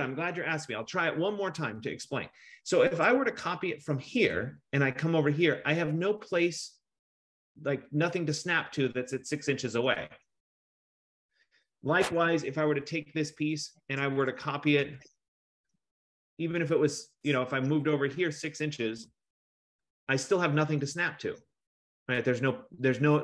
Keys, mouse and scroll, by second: 4.5-7.5 drag, 12.2 Escape, 13.6 click, 14.3 click, 14.7-15.8 typing, 17.4 typing, 19.0-20.9 typing.